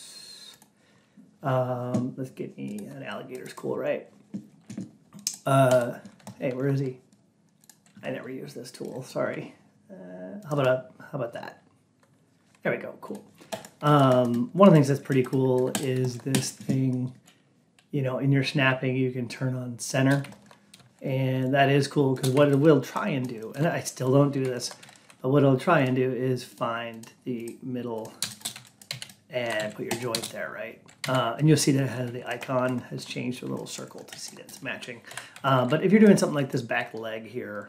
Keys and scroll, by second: 28.8 alt+x.